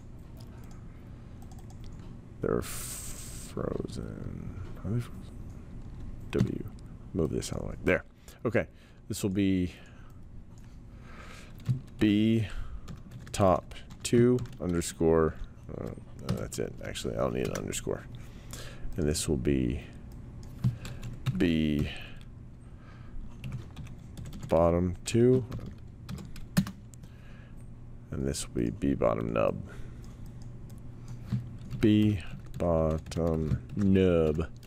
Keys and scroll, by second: 6.3 w, 12.0-14.9 typing, 16.2 BackSpace, 17.4 Return, 21.0-22.2 typing, 23.4-26.1 typing, 26.5 Return, 31.5-34.6 typing.